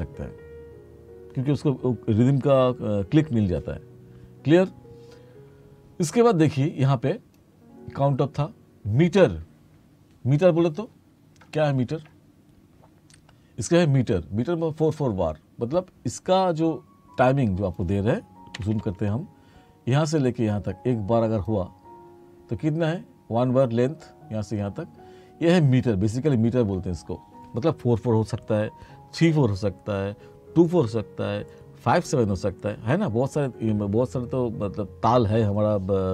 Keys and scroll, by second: 18.7 t.